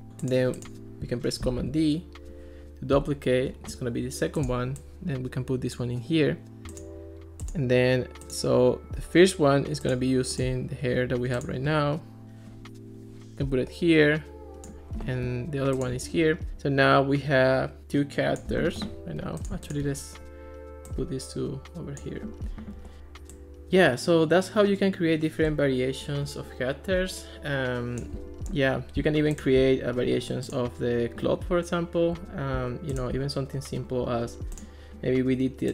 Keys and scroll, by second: 1.5 super+d.